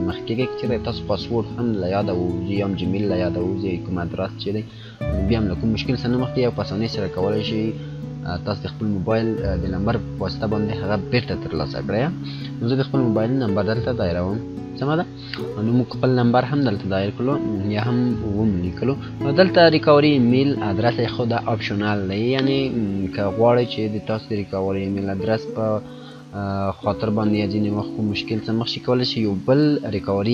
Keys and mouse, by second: 14.3 click, 16.2 F9.